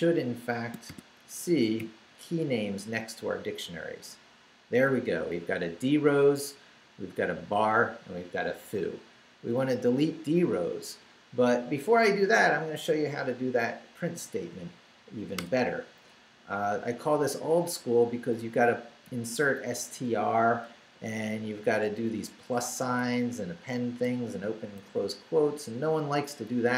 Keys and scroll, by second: 0.0-0.9 typing, 0.7 shift+Return, 1.4 shift+Up, 2.4 Return, 15.4 Return, 16.1 Left, 22.7 Right, 26.4 Left.